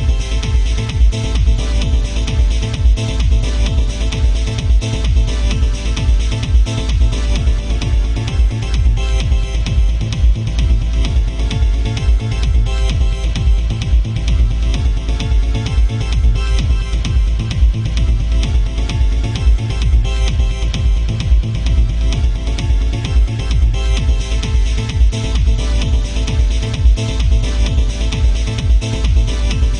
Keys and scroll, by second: 1.0 ctrl+z, 12.1 ctrl+z, 12.4 ctrl+z.